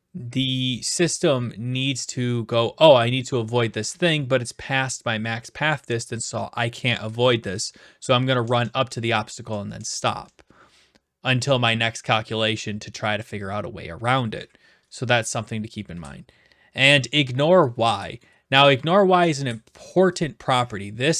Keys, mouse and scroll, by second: 18.2-19.3 right drag, 20.2-21.1 drag.